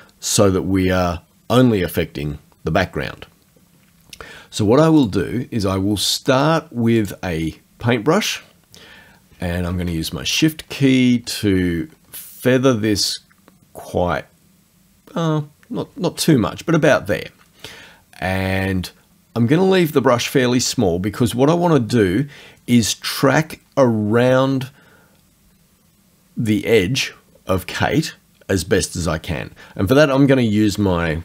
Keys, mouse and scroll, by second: 5.0 click, 7.0 click, 10.3 shift+scroll up 2, 11.2-11.7 shift+scroll up 2, 11.9-12.5 shift+scroll up 2, 13.3-14.0 shift+scroll down 4.